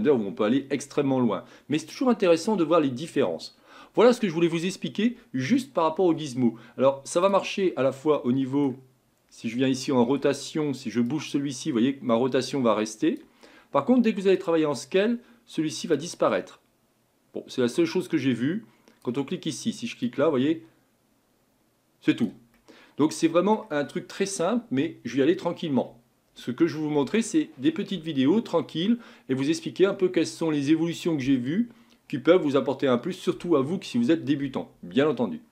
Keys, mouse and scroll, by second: 7.2-9.1 drag, 9.1-11.1 middle drag, 11.1 click, 14.4-16.1 drag, 20.1 click, 22.6-25.7 middle drag.